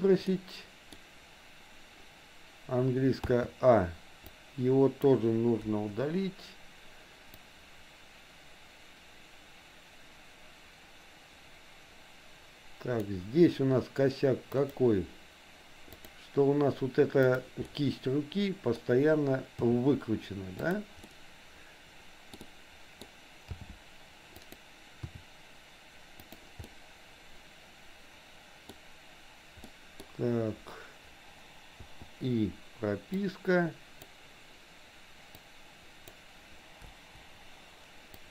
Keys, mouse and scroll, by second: 0.3 middle click, 3.3 a, 4.2-5.2 drag, 5.8 Delete, 7.4-13.2 drag, 14.6 click, 16.1 click, 17.3 click, 17.7-18.7 middle drag, 19.7 r, 21.1-22.3 middle drag, 22.4 middle click, 23.6 g, 25.1 r, 26.7-28.7 middle drag, 29.7 middle click, 31.9 i, 33.3 click, 35.4 click, 35.7 click, 36.9 Delete, 38.2-38.3 drag.